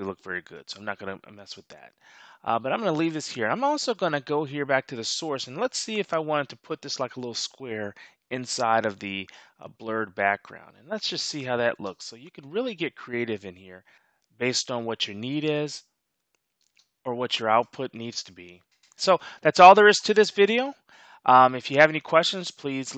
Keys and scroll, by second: 11.7 space, 16.6 space.